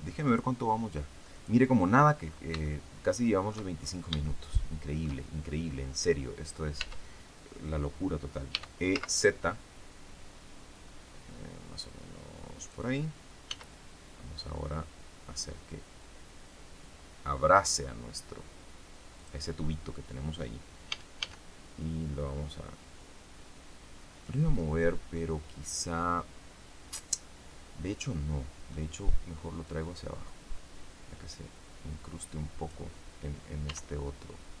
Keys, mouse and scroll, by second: 0.2 click, 1.2 click, 2.1-2.4 scroll up 3, 2.6-3.6 shift+middle drag, 3.7-4.0 shift+scroll up 3, 4.2 shift+middle click, 6.7 Tab, 8.4 e, 8.8 z, 12.5 click, 13.4 s, 19.1 click, 20.8 a, 24.5-28.8 middle drag, 29.6-32.8 drag, 32.9 scroll down 2, 33.6 Tab.